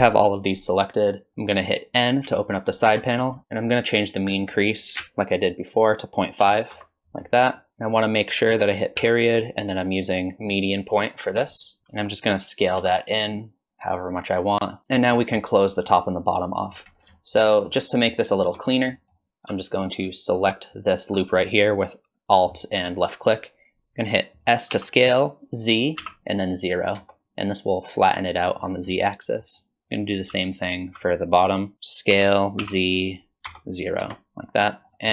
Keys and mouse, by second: 2.3 n, 4.4-7.2 drag, 7.6 middle click, 11.5 middle click, 12.8 s, 14.8 Tab, 14.8 middle click, 15.1 middle click, 15.9 middle click, 17.1 shift+middle click, 17.5 middle click, 17.9 middle click, 18.3 shift+middle click, 18.9 middle click, 20.2 alt+click, 24.7 s, 29.0 middle click, 30.6 alt+click, 32.1 s.